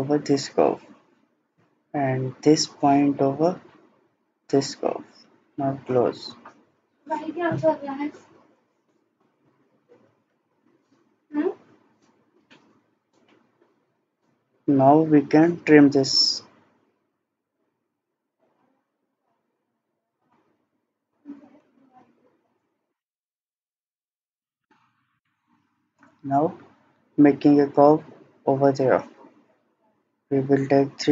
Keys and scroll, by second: 24.3 Escape.